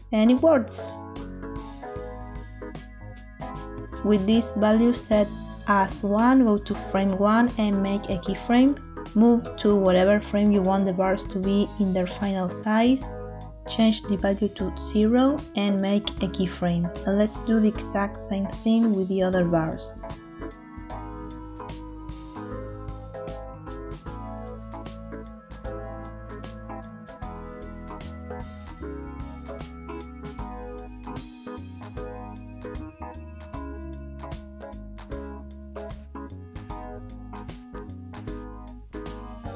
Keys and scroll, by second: 7.0 i, 21.3 Tab, 25.6 Tab, 26.9 |, 32.1 Tab, 35.7 Tab, 37.0 shift+\, 39.0 shift+\.